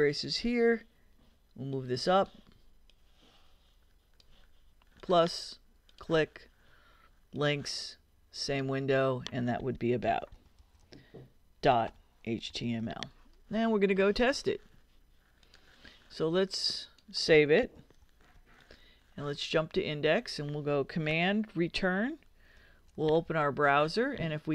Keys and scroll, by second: 9.8-13.3 typing, 18.0 super+s, 22.5 super+Return.